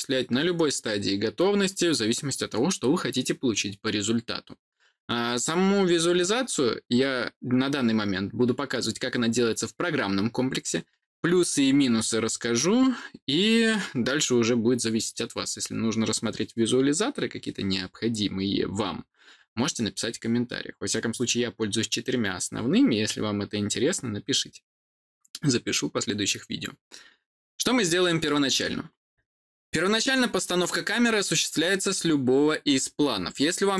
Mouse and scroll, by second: 33.7 click.